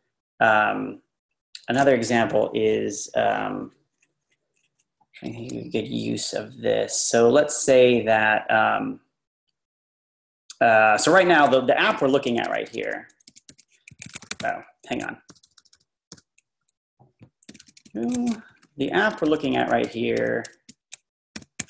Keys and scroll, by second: 10.9 Page_Down, 10.9 Page_Down, 11.3 Page_Up, 11.9-16.1 typing, 14.9 Escape, 17.4-19.6 typing, 21.2-21.6 typing.